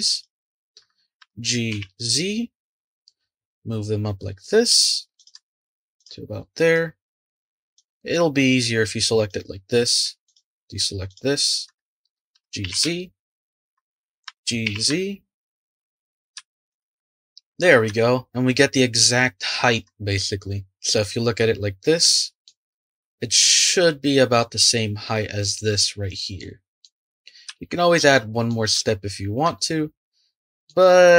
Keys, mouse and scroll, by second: 0.1 shift+click, 1.2 g, 5.5 g, 6.6 click, 7.7 click, 10.2 shift+click, 11.1 shift+click, 12.3 g, 13.6 shift+click, 14.2 g, 16.7 shift+click, 16.9-24.0 middle drag, 25.9-26.4 scroll down 2, 26.4 middle click, 27.0-27.5 scroll up 2, 27.5-29.2 shift+middle drag, 29.2-29.5 scroll down 3, 29.5-30.9 shift+middle drag, 30.9-31.1 scroll up 2.